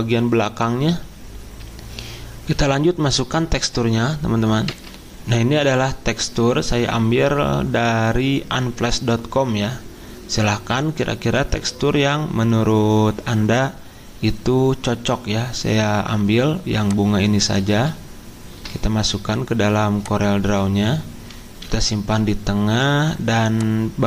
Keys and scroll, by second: 2.3 c, 4.7 F10, 17.7 alt+Tab, 21.6 p.